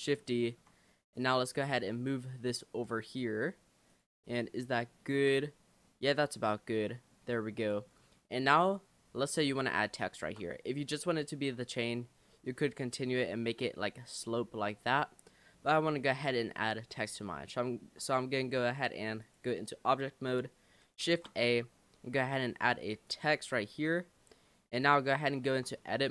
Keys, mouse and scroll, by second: 0.3-1.4 shift+middle drag, 1.4 click, 3.9 click, 4.4-4.9 scroll up 5, 5.1 shift+middle click, 5.6-6.0 scroll up 1, 6.0-7.1 middle drag, 7.2-7.6 scroll down 2, 7.6 click, 7.9-8.4 scroll down 3, 8.4 middle click, 9.1-9.6 scroll up 3, 10.1-11.4 shift+middle drag, 11.4 Tab, 12.3-15.3 middle drag, 15.3-15.6 scroll down 3, 15.7-16.0 middle drag, 16.0-16.3 scroll down 1, 16.3-19.2 shift+middle drag, 19.2 click, 21.1 shift+a, 24.8 click, 25.5 Tab, 25.8-26.1 middle drag.